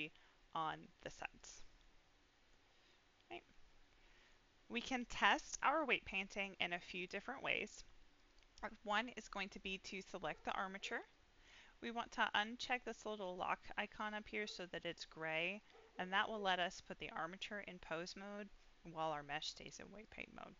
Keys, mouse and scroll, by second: 1.3 click, 1.7 middle click, 2.3 click, 2.7 scroll down 1, 2.8-4.3 middle drag, 5.3 click, 6.0 middle click, 6.8 middle click, 8.1 click, 13.3-16.3 drag, 18.0 click, 20.0 click.